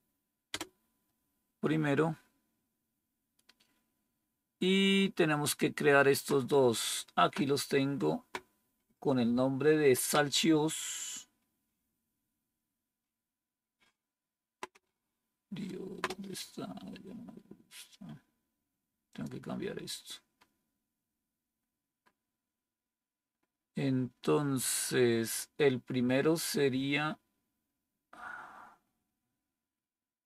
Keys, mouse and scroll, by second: 0.4 Return, 13.1-16.5 scroll down 1, 16.5-19.0 scroll down 1, 19.0-22.4 scroll down 1, 22.4-27.7 scroll down 1, 27.7-30.2 scroll down 1.